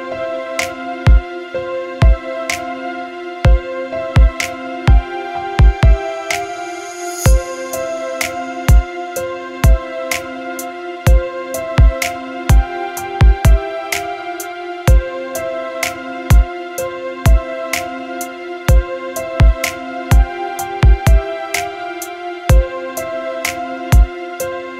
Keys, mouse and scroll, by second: 1.0 click, 2.7-8.7 drag, 8.7-11.7 middle drag, 18.7 click, 20.4 click, 23.9-24.7 drag.